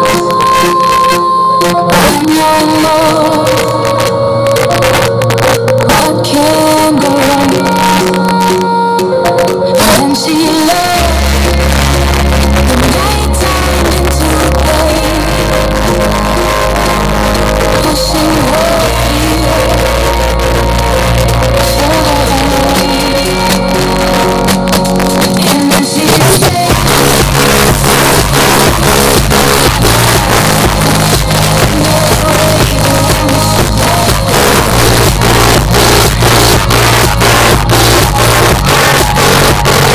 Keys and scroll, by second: 0.0 Down, 0.1 Down, 0.3 Down, 0.6 Down, 0.8 Down, 1.0 Down, 1.3 Down, 1.7 Return.